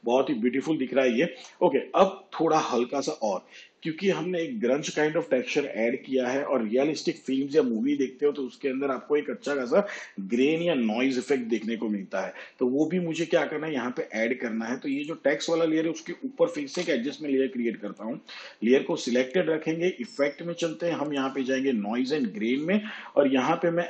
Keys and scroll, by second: 16.6 ctrl+alt+y.